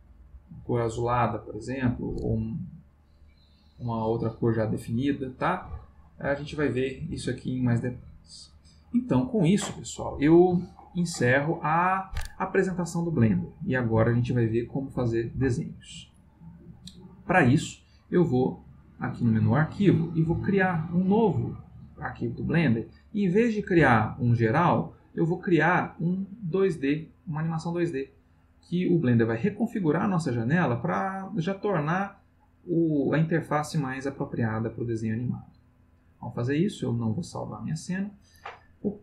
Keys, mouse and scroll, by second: 0.1 click, 2.6 click, 3.7 click, 6.2 click, 7.2-8.4 middle drag, 9.9 middle click, 10.7 ctrl+middle click, 18.8 click, 35.2 click, 37.2 click.